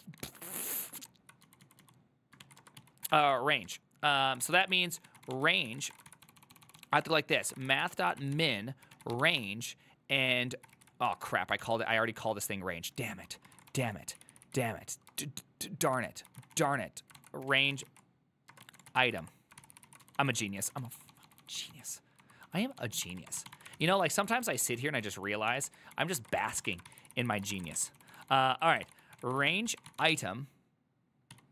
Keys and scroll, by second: 0.0-0.3 typing, 0.5 ctrl+u, 1.7-31.5 typing, 17.2 ctrl+w, 24.3 ctrl+c.